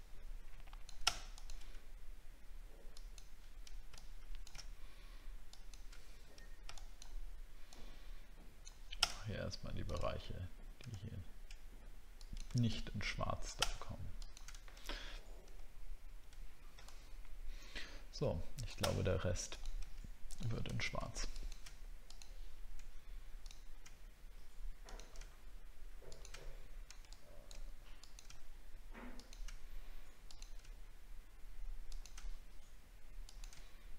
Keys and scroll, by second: 15.7 alt+scroll down 1, 19.0 alt+scroll up 5.